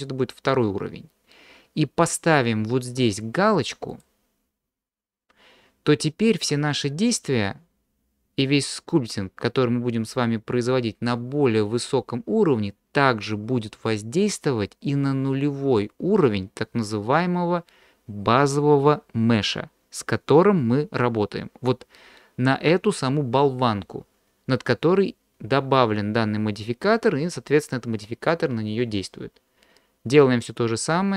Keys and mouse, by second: 4.0 click, 6.8 middle click, 7.8 click, 7.8 middle click, 7.8 right click.